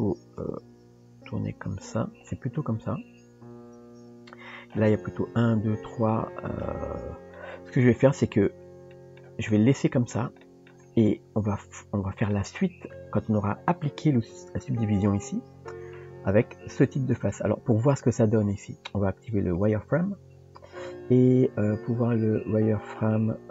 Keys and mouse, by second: 0.7 g, 2.3-4.7 middle drag, 6.1 middle click, 7.4 middle click, 8.3 Tab, 8.9 shift+middle drag, 9.5-10.2 middle drag, 10.4 shift+middle drag, 11.0-12.3 middle drag, 15.9-16.4 middle drag, 17.7-20.0 drag.